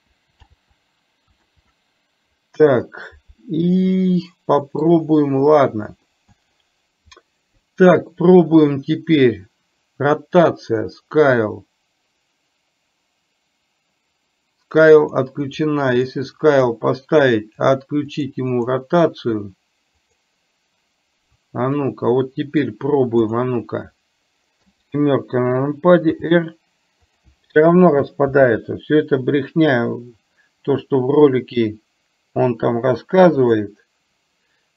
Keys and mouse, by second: 3.9 middle click, 4.6 middle click, 6.3-6.7 middle drag, 15.1 drag, 15.5 click, 16.6 click, 18.1 click, 18.6 click, 20.1 click, 21.9-22.6 middle drag, 23.4 drag, 26.3 r, 28.4 ctrl+z, 33.5 click.